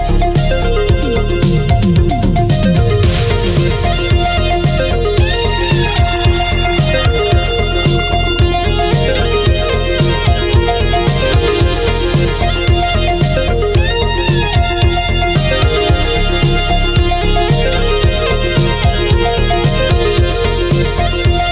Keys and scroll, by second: 3.3 space, 7.6 ctrl+z, 8.1 ctrl+z, 18.9 ctrl+z.